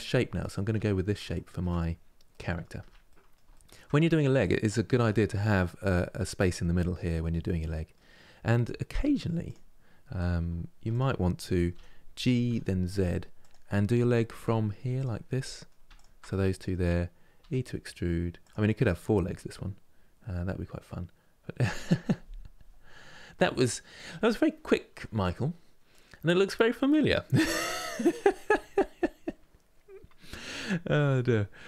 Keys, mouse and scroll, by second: 0.5 middle click, 1.4 scroll up 2, 2.0 middle click, 2.5 Tab, 2.8 middle click, 3.6-4.1 scroll up 4, 4.1-8.7 middle drag, 8.7 2, 9.1 click, 10.6 shift+click, 11.4 g, 14.6 click, 15.1 middle click, 15.6 shift+click, 16.0-17.1 middle drag, 17.1 e, 18.6-31.6 middle drag.